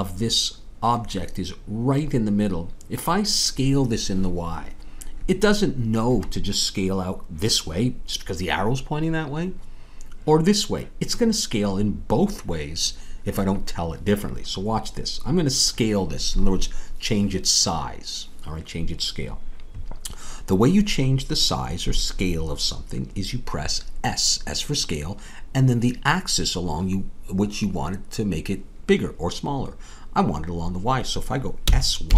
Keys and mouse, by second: 31.7 s.